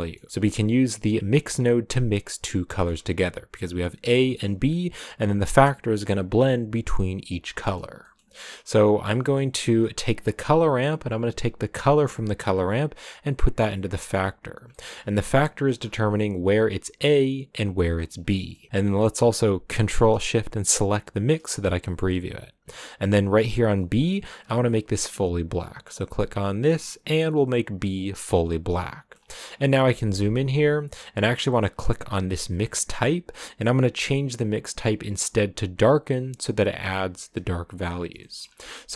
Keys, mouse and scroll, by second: 0.3-1.6 drag, 8.6 click, 10.2 click, 11.8-14.0 drag, 15.2-21.4 drag, 28.7 middle click, 29.1-29.7 scroll up 5, 29.9-35.8 shift+middle drag, 35.8-36.9 drag, 37.8 scroll down 4, 38.2 shift+middle click, 38.4 scroll up 2, 38.9 shift+middle click.